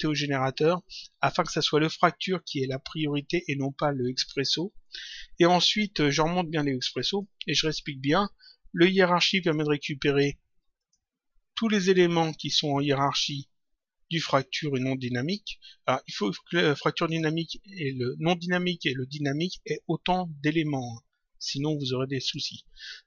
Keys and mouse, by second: 5.7 click, 6.8 click, 10.6 click, 16.7 click, 18.9 click, 22.1 click.